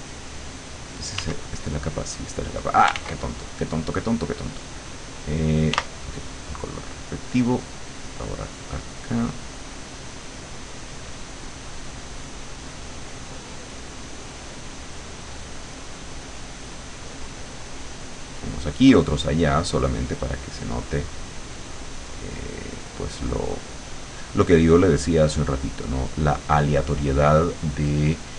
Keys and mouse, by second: 1.2 w, 3.0 ctrl+z, 5.8 r, 6.8 click, 7.5 click, 8.4 click, 9.4 click, 11.0 click, 11.5 click, 12.2 click, 12.7 click, 13.1 click, 14.9 click, 16.0 click, 16.4 click, 16.8 click, 17.6 click, 18.0 click, 18.7 click, 19.0 click, 19.9 click, 20.2 click, 21.0 click, 21.8 click, 22.2 click, 22.6 click, 23.3 click, 24.7 click, 25.3 click, 26.0 click, 26.3 click.